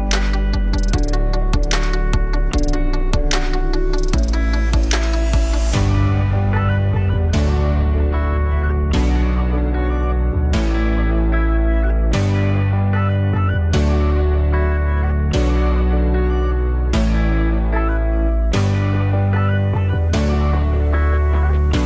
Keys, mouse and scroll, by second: 0.6 alt+middle click, 0.9 e, 12.4 3, 13.1 click, 13.5 alt+shift+click, 13.7 alt+shift+click, 15.0 s, 17.7-21.8 right drag.